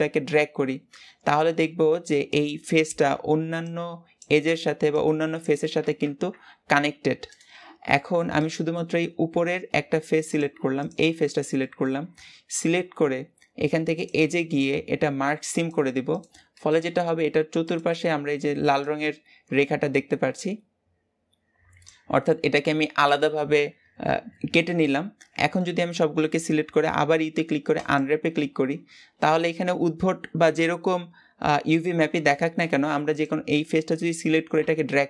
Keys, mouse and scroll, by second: 6.6 g, 7.8 middle click, 8.3 click, 10.1 click, 11.4-15.5 shift+middle drag, 15.5 click, 16.4 middle click, 16.8 scroll up 1, 17.6 click, 24.7 middle click, 25.5 a, 27.8 u, 33.0 click, 34.5 g.